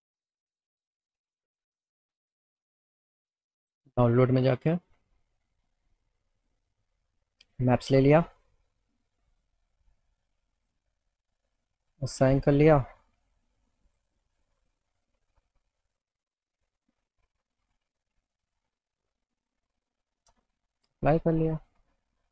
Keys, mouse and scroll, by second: 3.6 click, 5.3 click, 5.5 click, 6.4 click, 11.5 click, 12.4 click, 13.9 click, 19.5 right click, 20.5 alt+middle click, 21.5 middle click.